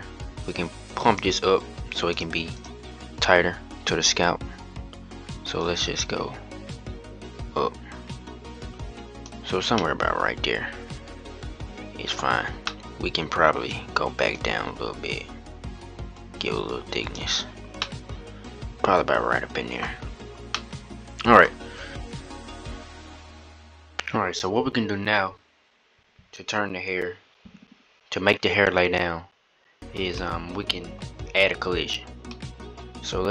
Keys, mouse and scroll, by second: 2.3 click, 5.4-9.1 drag, 9.5-11.9 middle drag, 11.9-12.4 scroll down 3, 12.4-13.1 middle drag, 13.1-14.1 scroll up 1, 14.1-17.1 drag, 17.5-19.6 middle drag, 19.6-20.3 scroll up 4, 20.3-21.9 middle drag, 30.5-30.9 middle drag, 30.9-31.4 scroll up 1, 31.4-32.1 scroll up 1, 32.1-33.3 middle drag.